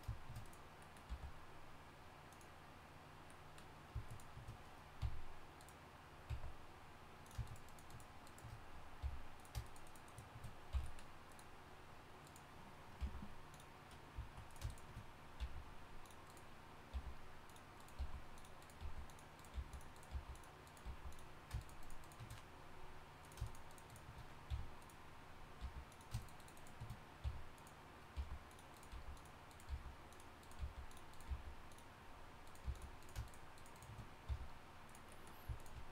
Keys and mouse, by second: 1.1 g, 5.0 f, 6.3 e, 7.7 shift+right click, 9.0 f, 10.7 f, 13.0 g, 15.4 v, 16.9 g, 18.0-20.8 typing, 24.5 f, 25.6 g, 27.2-31.3 typing, 32.6 g, 34.3 f.